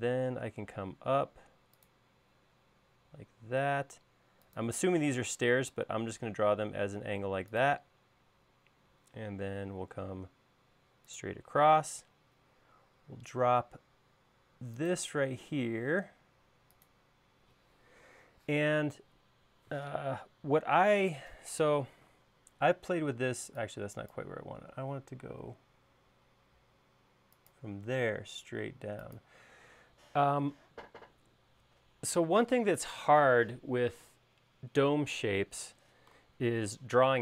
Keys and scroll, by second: 21.0 space, 23.3 e, 24.7 l.